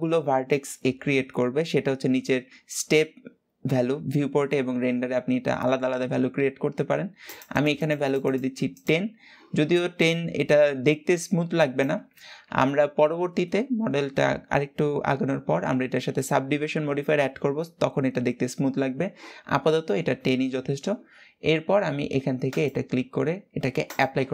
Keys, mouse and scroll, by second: 6.9 click, 7.2-12.1 drag, 22.2-24.3 drag.